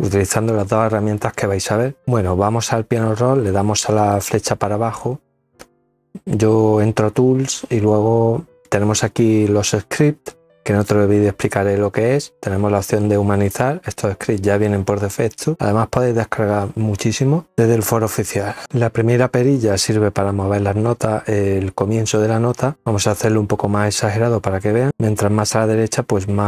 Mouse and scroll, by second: 4.0 click, 22.7 click.